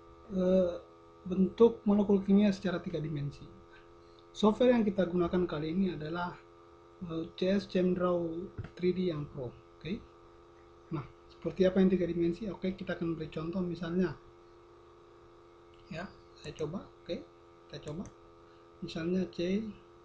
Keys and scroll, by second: 14.0 v.